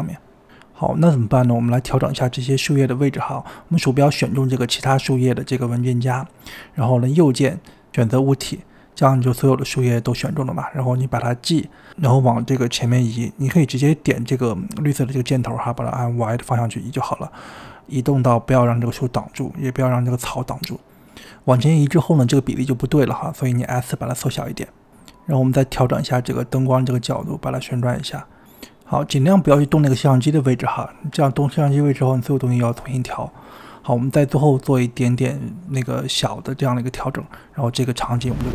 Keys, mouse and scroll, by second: 0.3 click, 1.5 click, 2.5 click, 4.0 click, 4.2 g, 5.2-6.0 scroll up 5, 6.0 click, 6.9-9.0 right drag, 9.0-11.3 scroll down 2, 11.3 KP_7, 12.8-14.3 scroll down 2, 14.3 KP_7, 16.1 click, 19.5-21.7 typing, 23.1 s, 23.3 g, 24.1 g, 24.7 click, 25.6-26.3 scroll up 1, 26.3 click, 26.9-28.8 typing, 28.4 click, 29.2-29.5 scroll up 2, 29.5 shift+middle click, 30.6 click, 31.1 click, 31.8 middle click, 32.1 scroll up 2, 32.1 middle click, 32.2 click, 32.3 shift+middle drag, 32.5 click, 32.6 click, 32.6 middle click, 32.7-36.5 typing, 32.8 shift+middle click, 32.8 scroll up 2, 33.5 click, 33.9 click, 34.3 click, 35.0 middle click, 35.2 shift+middle click, 35.3 drag, 35.4 click, 35.7 drag, 36.0 drag, 36.2 middle click, 36.3 click, 36.7 shift+middle click, 36.9 click, 37.6 click, 37.7 scroll down 3, 38.0 right click, 38.2 m, 38.4 click.